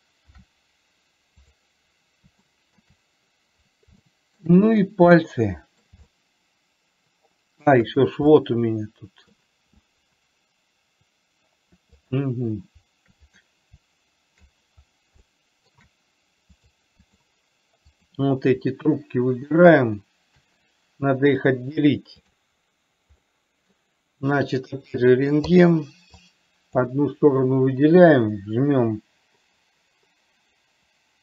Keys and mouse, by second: 0.5 ctrl+p, 2.9 shift+middle drag, 4.4 shift+middle click, 5.5-6.1 middle drag, 6.5-8.0 shift+middle drag, 8.6-9.7 middle drag, 15.6 shift+middle click, 16.9 click, 18.4 click, 21.9-22.9 drag, 23.5 middle click, 25.4 click, 25.9 click, 26.6 click.